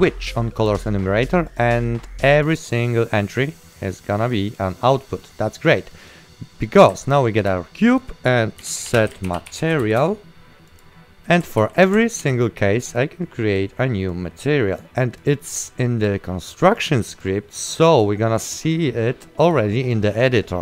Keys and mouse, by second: 0.8 click, 5.1 right click, 7.9 click, 8.7-10.4 typing, 10.8 click, 11.4 right click, 11.7 ctrl+w, 12.3 ctrl+w, 13.1 click, 16.7 right click.